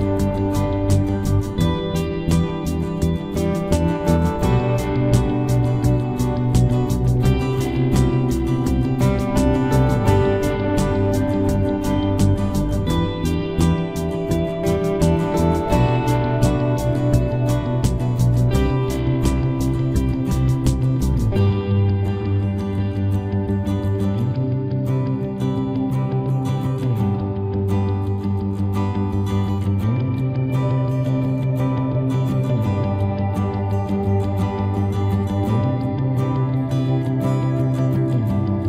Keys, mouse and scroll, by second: 5.3 right click, 5.5 c, 9.7-12.1 drag, 10.5 c, 13.8-15.1 right drag, 14.2 z, 15.1-16.5 middle drag, 16.5 KP_3, 16.7 KP_Decimal, 17.3-18.3 middle drag, 17.6 z, 19.5 e, 21.8 c, 25.9 right click, 26.5 e, 28.6 ctrl+s, 36.3-37.4 middle drag, 37.4 right click, 38.0 KP_Decimal.